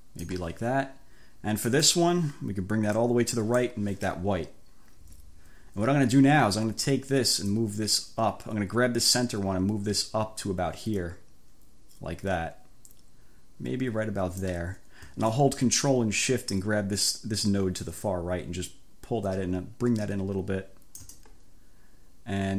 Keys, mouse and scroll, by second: 1.7 click, 3.1 click, 7.5-14.7 drag, 18.0-21.3 ctrl+shift+drag.